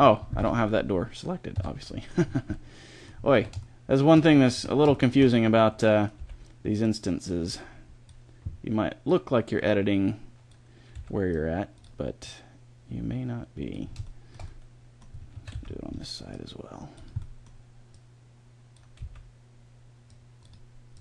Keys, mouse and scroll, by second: 0.3 Tab, 1.4 Tab, 1.9 middle click, 3.3 a, 4.4 a, 5.0-6.0 middle drag, 6.0 b, 8.9 click, 10.8 c, 13.7 middle click, 14.2 middle click, 15.2 a, 15.4 c, 17.8-19.5 drag, 18.9 c, 20.3-21.0 drag.